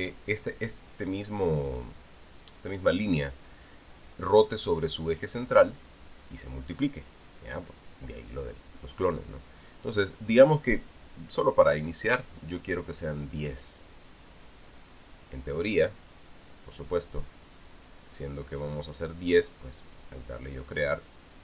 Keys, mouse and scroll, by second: 2.1 click, 12.9 KP_0, 15.8-17.8 drag, 21.3 click.